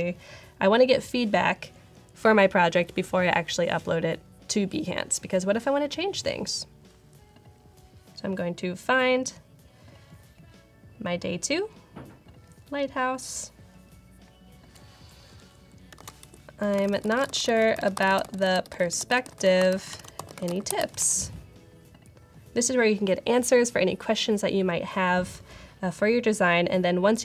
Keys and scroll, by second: 15.6-17.4 typing, 19.5 typing.